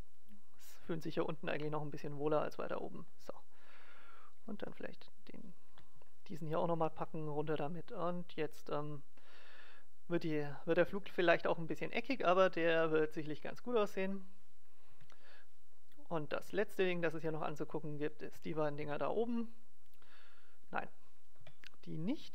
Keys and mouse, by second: 3.0-4.0 drag, 4.3 click, 4.3-6.0 right drag, 4.5 g, 6.1 right click, 6.5-8.3 right drag, 6.7 g, 11.5 click, 11.6-13.4 middle drag, 14.8 KP_1, 17.1-19.7 right drag, 18.8 KP_0, 21.3 KP_0.